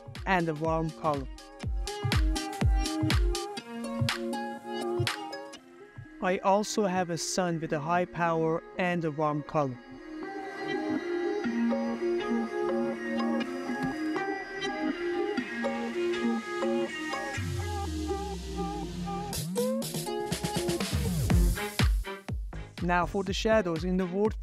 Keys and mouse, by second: 1.1 click, 2.9 click, 3.2 ctrl+middle click, 3.3 shift+middle click, 3.8 click, 4.0 ctrl+middle drag, 4.4 middle click, 4.9 g, 4.9 Escape, 5.0 middle click, 5.2 middle click, 5.4 shift+middle click, 5.7 shift+click, 5.7 shift+middle click, 6.0 click, 6.5 click, 7.5 click, 8.2 click, 9.9 shift+middle click, 10.3 r, 10.7 Escape, 10.9 middle click, 10.9 r, 11.4 r, 11.7 Escape, 12.2 click, 12.5 click, 12.7 ctrl+middle click, 15.5 shift+middle click, 16.1 click, 17.0-17.4 middle drag, 18.5 click, 22.1 click, 22.5 click, 23.8 shift+middle drag, 24.1 ctrl+middle click.